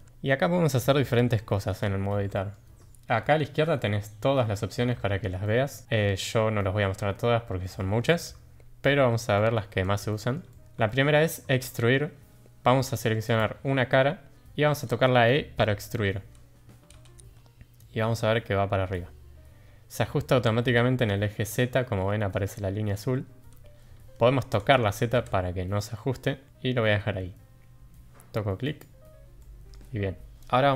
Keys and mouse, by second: 0.7 middle drag, 1.3-1.6 shift+middle drag, 2.3 shift+middle drag, 9.3 shift+middle drag, 10.1 middle click, 10.4 shift+middle click, 10.9 shift+middle drag, 11.7 shift+middle click, 13.3 click, 16.9 e, 29.4-29.7 middle drag.